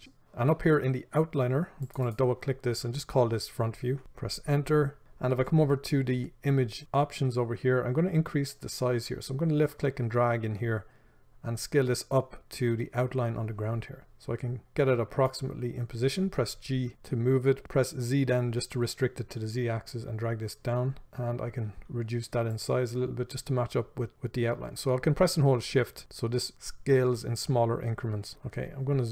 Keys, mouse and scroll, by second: 2.3-21.6 drag, 4.0 Return, 16.6 g, 23.5-29.1 shift+drag, 29.0 scroll up 1.